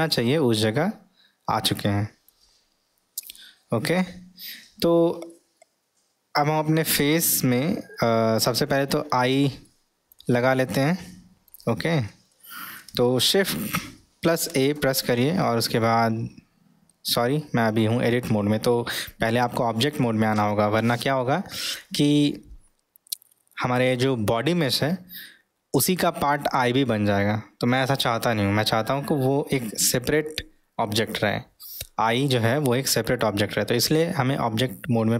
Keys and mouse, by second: 0.1-2.5 middle drag, 3.8-5.0 middle drag, 5.3-8.5 middle drag, 9.7-10.2 middle drag, 10.5-11.5 middle drag, 12.3-12.8 middle drag.